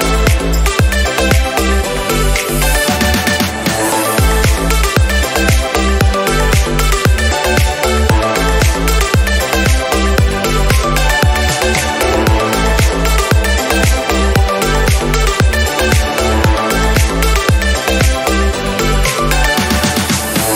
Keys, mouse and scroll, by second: 0.1 g, 1.4 click, 1.7 click, 3.2-4.0 scroll down 1, 4.4 click, 4.5 g, 6.7-7.3 scroll up 1, 7.3 click, 7.4 g, 9.0 click, 9.3 click, 9.8 g, 10.8 g, 12.6 middle click, 13.0 KP_Decimal, 13.3-13.8 scroll down 3, 13.8-15.0 middle drag, 15.0 click, 15.7 ctrl+z, 16.9 click, 20.5 scroll up 1.